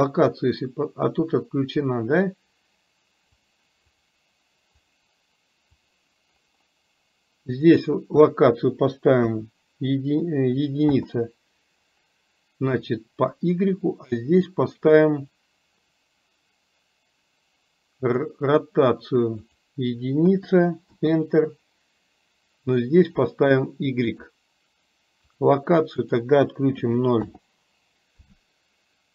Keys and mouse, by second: 3.5 click, 4.9-6.1 drag, 7.8-10.9 drag, 18.0 click, 19.6-21.0 drag, 23.2-24.4 drag, 25.3 click, 26.2-27.3 drag.